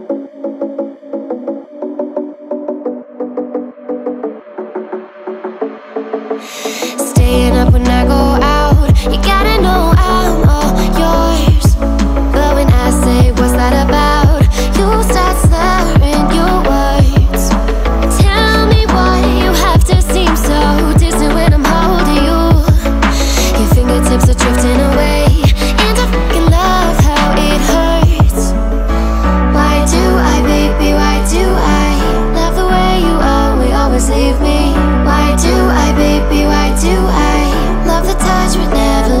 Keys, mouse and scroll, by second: 20.1 x.